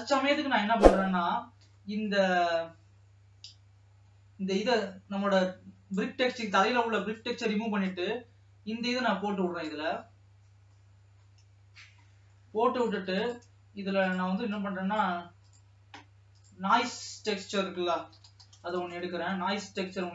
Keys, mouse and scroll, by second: 0.6-20.1 drag.